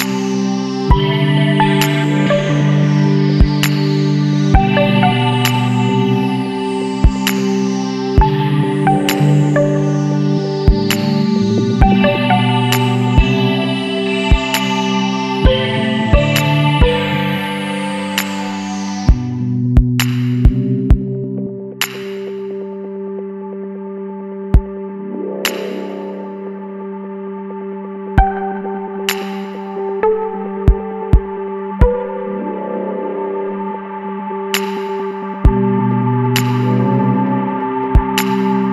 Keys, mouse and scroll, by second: 0.0 right click, 1.3 click, 2.7 click, 3.6 click, 5.1 ctrl+v, 7.9 click, 8.8 click, 11.6 click, 13.0 click, 13.8 click, 16.6 click, 17.7 KP_1, 17.9 KP_2, 19.8 click, 21.1 KP_1, 21.3 KP_2, 23.3 click, 26.0 click, 26.9 click, 28.2 ctrl+v, 29.3 click, 29.8 click, 30.4 click, 31.4 click, 33.2 click, 34.2 KP_1, 34.4 KP_8, 37.9 click.